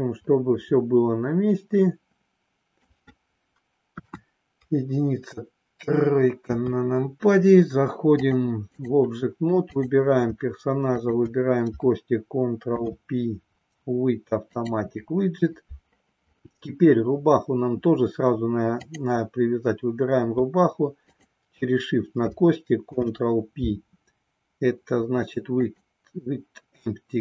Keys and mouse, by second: 3.9 KP_1, 6.3 KP_3, 8.1 click, 11.0 shift+click, 12.6 ctrl+p, 18.7 click, 21.0 shift+click, 22.8 ctrl+p.